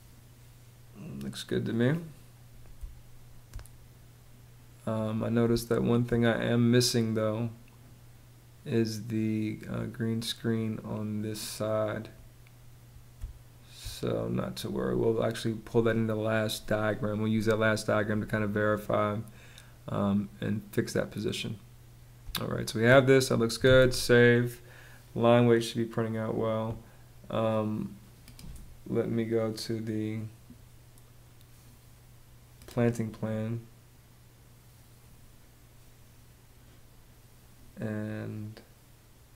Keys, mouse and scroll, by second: 2.3 space, 5.1 space, 12.9 space, 21.8 space, 23.2 super+s.